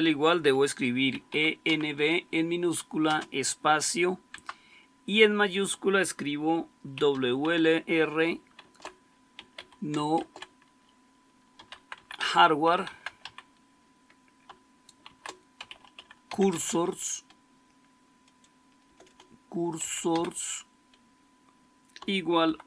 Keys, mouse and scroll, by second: 0.8-2.9 typing, 4.2 Caps_Lock, 6.6-7.4 typing, 8.5-13.6 typing, 14.9-17.2 typing, 18.8-20.0 typing, 22.3 typing.